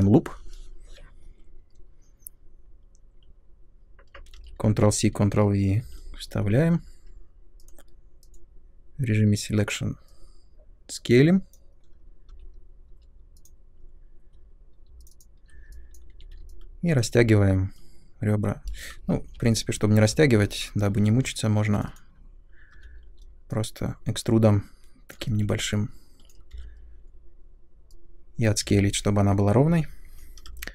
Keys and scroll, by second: 4.3 ctrl+c, 4.6 ctrl+v, 5.8 r, 12.3-13.4 typing, 16.1 r, 18.9 ctrl+z, 20.9 2, 22.7 w, 26.5 r, 28.6 space.